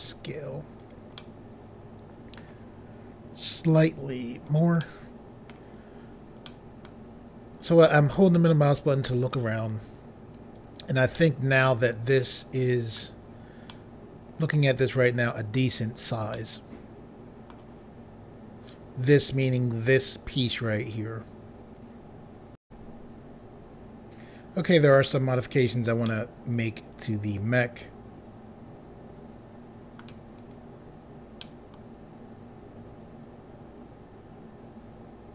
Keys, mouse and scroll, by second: 0.8 click, 1.2 middle click, 3.6 s, 4.5 click, 4.8 middle click, 6.5 middle click, 9.3 click, 11.2 middle click, 11.8-12.1 scroll up 1, 13.8 middle click, 16.4 middle click, 22.6 Pause, 26.0 middle click, 30.3 click, 31.7 click.